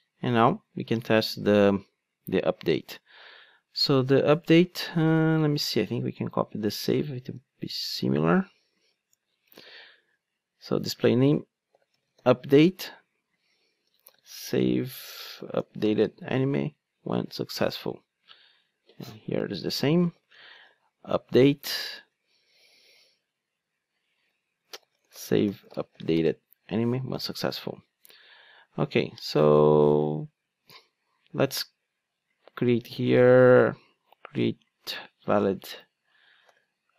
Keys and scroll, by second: 7.3 super+c, 9.7 super+v, 28.4 super+x, 30.4 super+z.